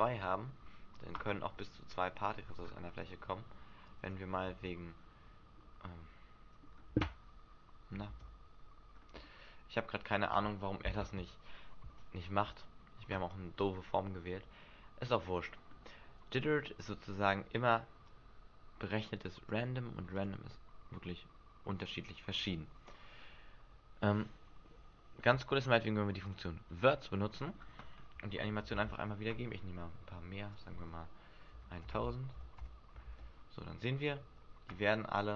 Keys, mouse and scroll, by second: 1.3 middle click, 2.5 alt+a, 3.5 Escape, 3.9 click, 4.4 alt+a, 5.8 middle click, 6.7 Escape, 8.0 alt+a, 9.2 middle click, 10.0 Escape, 13.8 middle click, 14.5-15.3 scroll up 3, 18.0 click, 20.2 click, 26.2 click, 26.9 middle click, 29.5 Escape, 30.5 click, 33.0 alt+a, 34.3 Escape.